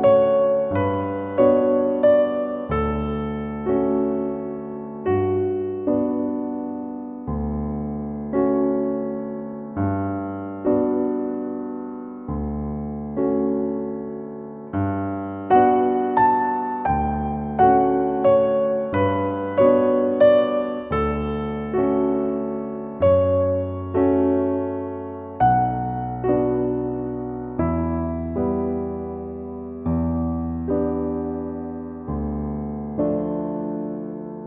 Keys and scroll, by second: 10.5 super+z, 25.5 BackSpace, 28.5 BackSpace.